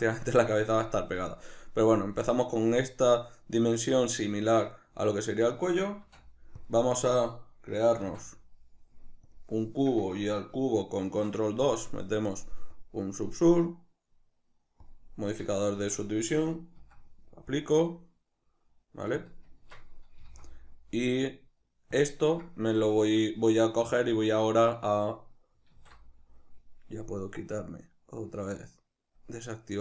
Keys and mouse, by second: 5.1 shift+middle click, 6.1 shift+s, 11.1 ctrl+2, 12.8 click, 14.8-19.3 drag, 15.8 Tab, 16.8 s, 19.6 Tab, 20.2 g, 22.1 click, 22.8-29.2 shift+middle drag, 25.8 alt+q, 29.2 click.